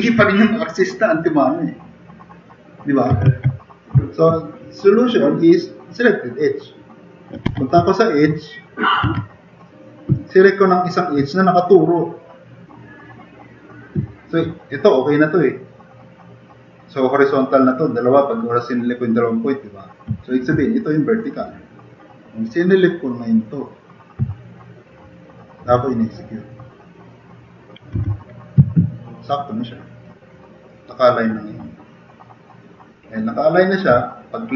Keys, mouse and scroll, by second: 3.3 ctrl+z, 4.9 click, 5.8 click, 7.5 2, 9.0 2, 28.0 4.